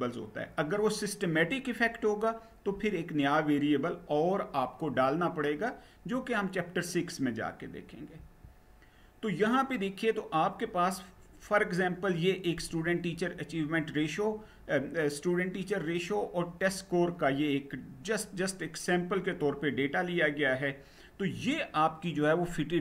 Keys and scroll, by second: 7.8 Down.